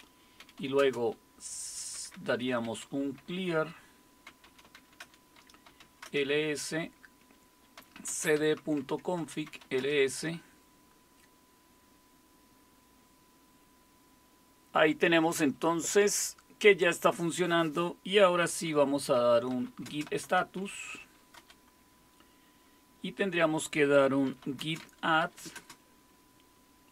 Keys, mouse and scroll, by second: 0.2-2.7 typing, 4.0-6.2 typing, 7.5-10.1 typing, 18.9-21.4 typing, 23.8-26.9 typing.